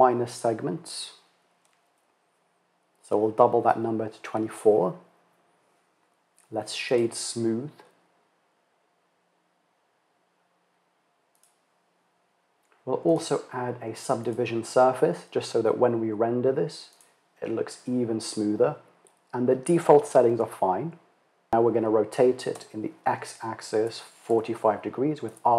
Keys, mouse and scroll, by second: 6.5-11.0 drag, 12.5 click, 13.7-16.9 drag, 21.4 r.